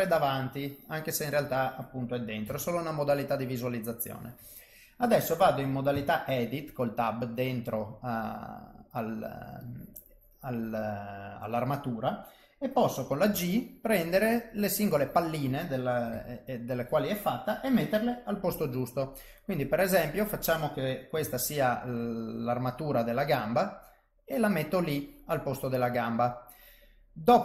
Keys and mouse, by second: 2.4 KP_1, 5.9 Tab, 7.4 click, 8.6 click, 9.6 click, 13.3 g, 16.0 KP_3, 18.5 g, 21.1 KP_3, 22.2 middle click, 25.9 middle click.